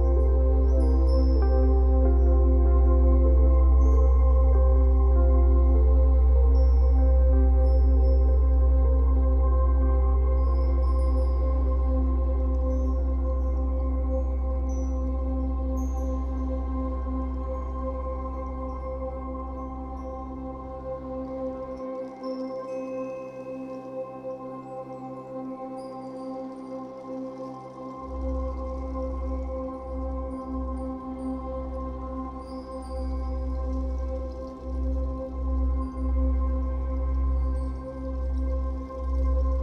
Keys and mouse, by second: 1.3-2.3 typing, 2.7-3.8 alt+shift+drag, 3.4 typing, 5.4-7.0 drag, 6.8-7.5 typing, 7.6-9.0 drag, 9.4 b, 10.1-13.5 drag, 13.5 /, 15.5-16.5 shift+drag, 18.2 5, 19.3-20.8 alt+shift+drag, 21.8-25.9 drag, 26.1 g, 28.1-30.1 drag, 28.9 space, 30.4-32.3 typing, 32.6-37.2 drag, 36.4-37.1 typing.